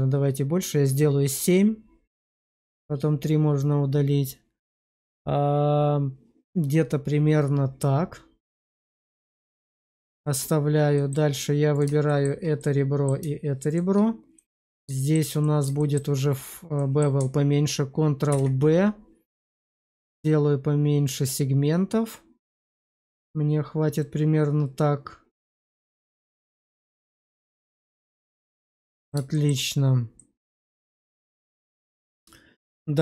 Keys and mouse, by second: 8.7 click, 9.5 middle click, 10.1 shift+middle click, 10.8 middle click, 11.9 shift+middle click, 12.5 middle click, 13.5 shift+click, 14.2 middle click, 14.9 shift+middle click, 15.3 middle click, 15.7 shift+middle click, 16.6 middle click, 18.2 ctrl+b, 27.1 click, 27.5 Tab, 28.2 middle click, 29.2 shift+middle click, 30.1-33.0 middle drag.